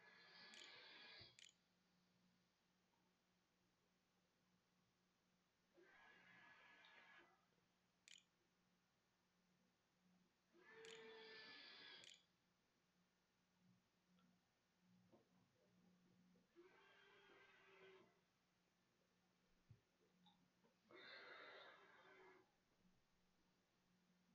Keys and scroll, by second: 0.0-2.4 typing, 7.5 Tab, 9.5-13.7 typing, 11.2 Return.